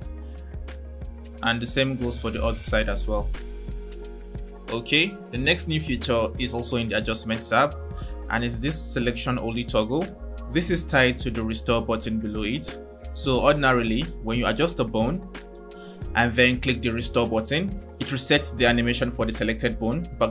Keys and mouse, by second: 0.6 click, 0.9 click, 2.3 click, 15.7 click, 17.2 click.